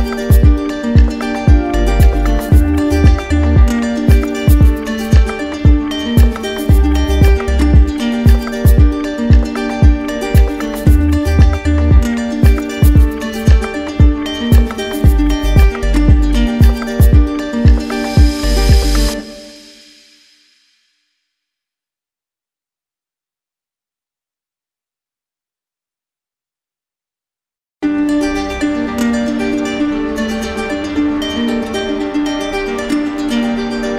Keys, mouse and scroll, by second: 0.4 click, 1.7 alt+click, 4.4 alt+click, 5.2 alt+right click, 5.6-6.7 drag, 7.1-8.7 drag, 8.7-10.3 alt+right drag, 10.3 click, 11.2 right click, 11.9 alt+right click, 13.4 alt+right click, 15.1 right click, 16.1 click, 24.3 ctrl+click, 25.1 alt+right click, 27.1 ctrl+click, 27.2 ctrl+z, 32.6 ctrl+click.